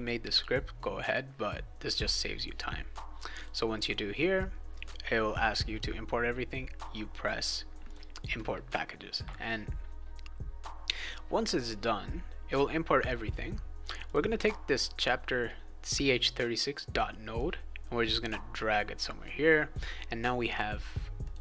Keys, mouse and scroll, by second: 1.1 click, 3.3 click, 7.8 click, 14.0 click, 17.3-19.0 drag, 19.9-21.0 right drag, 21.2 click.